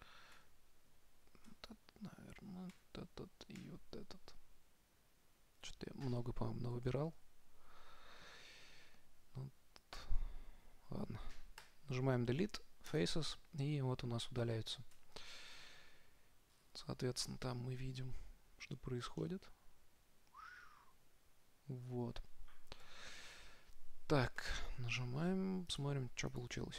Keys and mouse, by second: 0.0-0.6 typing, 1.8 l, 3.0 l, 3.9 l, 7.3 ctrl+z, 11.9 Delete, 15.3 Tab, 16.9 middle click, 17.6 middle click, 18.9 middle click, 21.3 middle click, 21.5 middle click, 23.1 Right, 24.7 KP_0, 26.0 click.